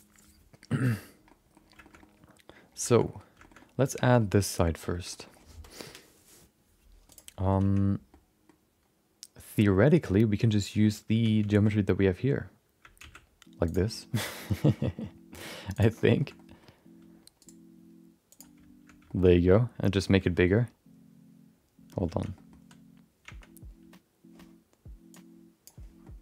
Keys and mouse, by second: 1.2 middle click, 1.8 shift+middle click, 2.0 middle click, 2.8 shift+middle click, 3.0 middle click, 3.4 shift+middle click, 3.5 middle click, 4.1 middle click, 4.9 shift+middle click, 5.1 middle click, 7.6 Tab, 8.1 middle click, 11.3 Tab, 11.5 shift+middle click, 13.0 shift+d, 16.1 click, 16.2 shift+middle click, 16.3 middle click, 17.4-18.6 right drag, 19.0 shift+middle click, 19.3 middle click, 20.4 shift+middle click, 20.5-21.9 middle drag, 22.1 Tab, 22.3 middle click, 23.5 Tab, 25.1 click, 26.0-26.2 middle drag.